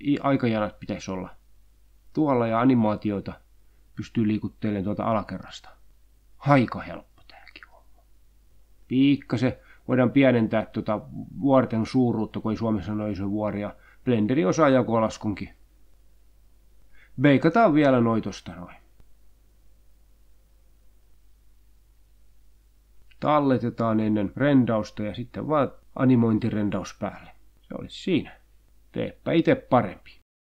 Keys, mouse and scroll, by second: 2.1-7.5 drag, 7.8 click, 9.3 click, 11.2 Right, 12.5 shift+/, 14.4 2, 15.0 Return, 16.5 click, 19.7 click, 20.3-21.0 scroll down 2, 21.4-22.2 scroll down 4, 22.7 click, 24.7 click, 25.7 click, 27.5 ctrl+s, 28.2 click, 30.3 click.